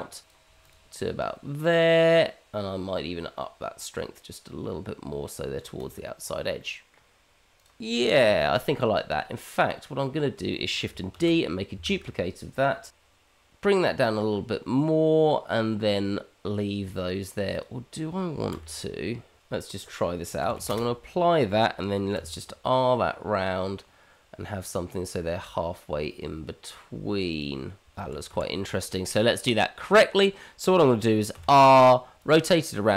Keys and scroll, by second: 0.8 g, 11.1 shift+d, 18.5 r, 20.4 q, 20.5 q, 22.1 r, 28.0 ctrl+z, 28.6 ctrl+z, 31.6 r.